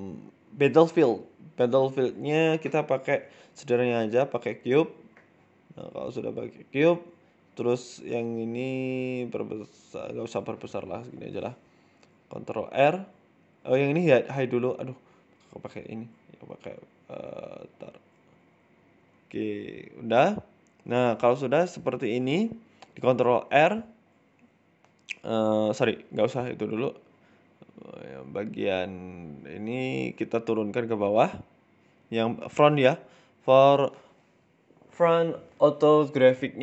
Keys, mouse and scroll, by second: 0.1 middle click, 0.4-1.1 scroll up 3, 1.1 scroll down 3, 1.2 shift+a, 3.4 shift+a, 4.4-4.9 scroll down 2, 4.9 s, 6.2-7.5 scroll up 6, 6.5 shift+middle click, 7.1 shift+middle click, 7.5 KP_1, 7.8-8.3 scroll up 4, 8.0 middle click, 8.3-9.1 scroll down 3, 8.7 s, 9.8 shift+middle click, 10.1 scroll up 1, 10.5 Tab, 10.7 middle click, 11.1 middle click, 11.6 ctrl+r, 12.9 middle click, 13.2 click, 14.3 h, 14.8 middle click, 14.9 ctrl+z, 15.8 click, 17.6 middle click, 18.1 click, 19.1 h, 19.3 middle click, 19.9 ctrl+r, 23.2 middle click, 23.8 ctrl+r, 25.7 middle click, 26.3 KP_3, 26.9 KP_1, 27.2 Tab, 27.5 Tab, 28.5 click, 29.1 click, 29.4-29.9 scroll up 4, 29.5 shift+middle click, 30.7 click, 31.3 g, 32.5 click, 33.1 g, 34.0 g, 35.4 click, 35.8 g.